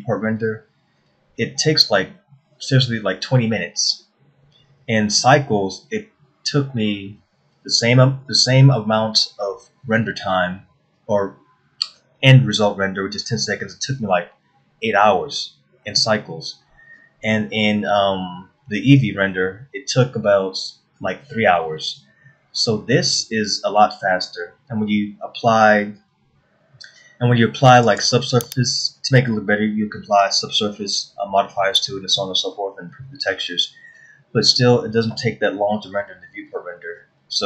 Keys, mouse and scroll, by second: 29.6 scroll up 2.